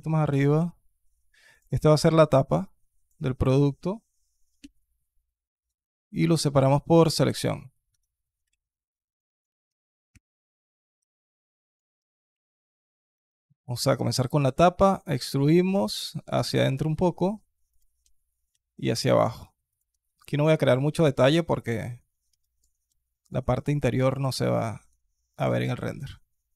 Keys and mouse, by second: 0.1 g, 1.9 KP_3, 2.4 click, 4.4 p, 6.5 alt+click, 7.7 Tab, 8.2 z, 8.7 alt+click, 9.2 click, 9.9 /, 10.7 Tab, 11.9 KP_2, 12.1 click, 13.2 alt+click, 14.2 e, 15.5 s, 17.9 e, 21.0 alt+click, 22.2 alt+click, 22.7 KP_2, 23.0 click, 23.4 alt+shift+click, 23.9 alt+shift+click, 25.2 ctrl+b.